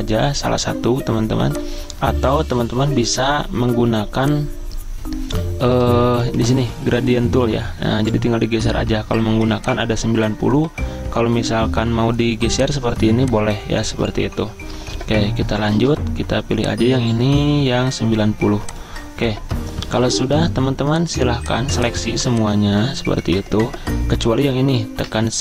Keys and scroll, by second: 6.2 g, 21.3 z, 22.1 v.